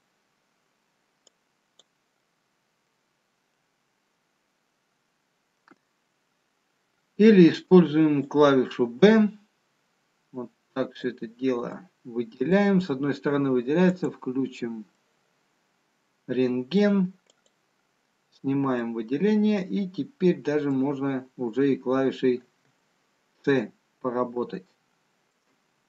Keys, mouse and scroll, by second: 2.1 click, 4.0 middle click, 4.0 scroll down 1, 7.5 b, 11.7 middle click, 14.4 click, 15.5 middle click, 18.7 click, 21.6-23.8 scroll up 2, 23.8 shift+middle click, 23.8 scroll up 2.